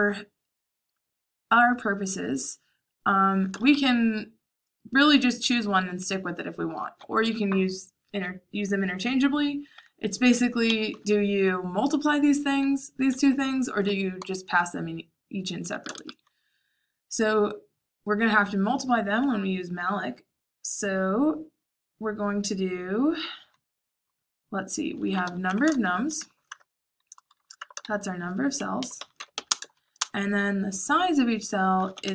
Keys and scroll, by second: 0.8 j, 3.5 shift+a, 10.6 Escape, 10.8-15.8 typing, 24.8-30.1 typing, 31.5-32.1 typing.